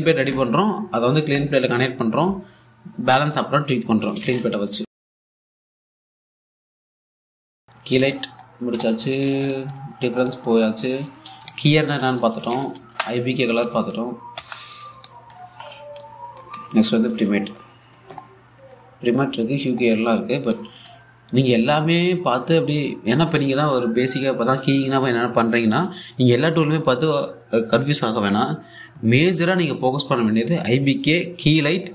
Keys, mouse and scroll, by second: 2.7 click, 4.7-5.2 scroll up 1, 8.2-11.7 drag.